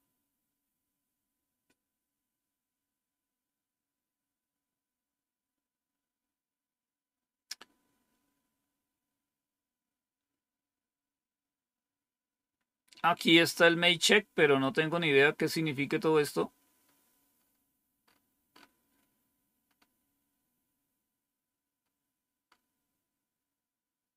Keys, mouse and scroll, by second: 5.8-6.8 scroll down 1, 6.8-12.4 scroll down 1, 12.4-14.1 scroll down 1, 14.1-14.8 scroll up 1, 14.8-15.5 scroll up 1, 15.5-16.0 scroll up 1, 16.0-17.3 scroll up 1, 17.3 scroll up 1, 17.9-18.5 scroll up 3, 19.5-21.7 scroll up 1, 21.7-22.4 scroll up 1, 22.4-24.1 scroll up 1.